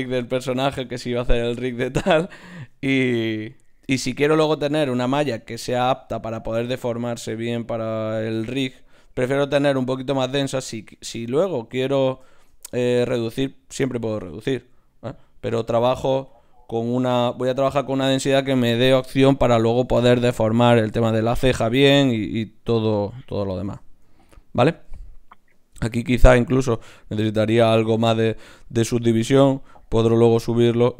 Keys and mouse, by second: 0.0 Tab, 2.5 ctrl+Tab, 3.4 click, 5.0 shift+q, 8.0 shift+q, 10.8-13.6 right drag, 12.3 shift+q, 13.0 shift+q, 15.8 ctrl+Tab, 16.8-18.5 drag, 18.5-21.5 middle drag, 22.2-26.7 middle drag, 27.8-30.9 middle drag.